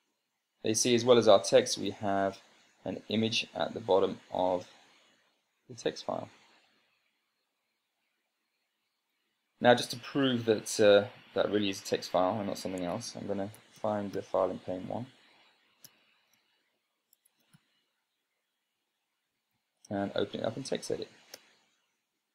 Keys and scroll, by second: 13.3 Escape, 13.7-14.9 typing, 16.1 super+space, 17.2-18.5 typing, 21.8 Return.